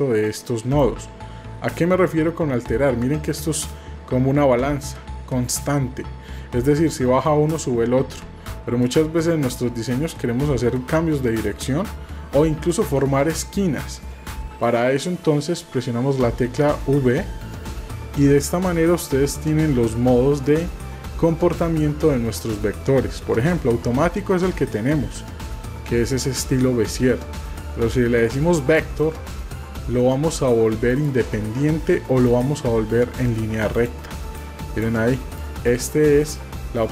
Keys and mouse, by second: 0.8-9.0 drag, 30.9 click, 33.7 click, 34.4 click, 35.4 click.